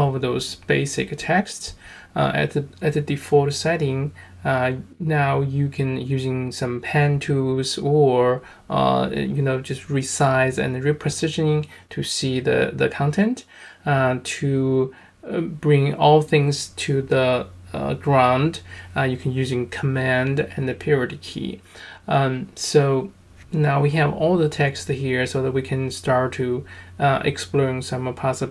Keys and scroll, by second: 15.5 v, 17.8 super+..